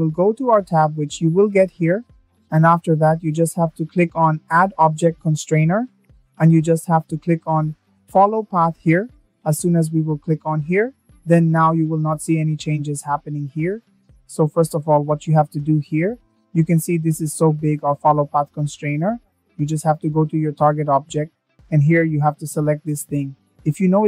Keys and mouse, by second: 3.0-7.7 drag, 14.0 click, 14.5-20.0 middle drag, 22.4 click.